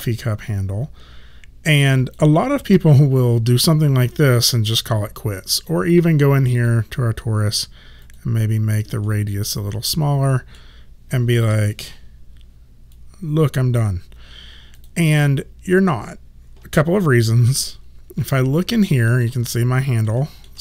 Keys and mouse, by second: 2.7 click, 5.6 click, 9.1 middle click, 11.5 r, 13.0 click, 18.4 alt+click, 19.3 middle click, 20.2 middle click.